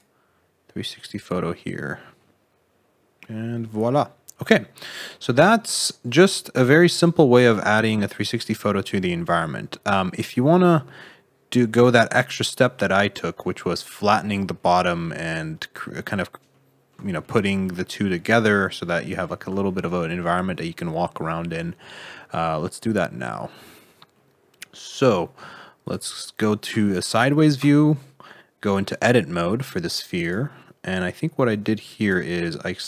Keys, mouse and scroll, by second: 4.4-5.1 scroll up 9, 5.1 middle click, 6.7 scroll up 1, 7.0 middle click, 8.0-8.6 scroll up 3, 8.6 shift+middle click, 10.8 scroll down 1, 10.8 middle click, 12.7 scroll up 1, 13.0 shift+middle click, 13.6-13.9 scroll down 4, 14.5 middle click, 15.5-15.8 scroll up 2, 15.8 middle click, 16.2 scroll down 2, 16.4 middle click, 18.3 middle click, 19.1 scroll up 4, 19.6 shift+middle click, 22.0 middle click, 22.4-23.2 scroll down 13, 24.1 middle click, 25.8 click, 27.5 Tab, 30.1 click, 31.9 click, 32.5 shift+middle click.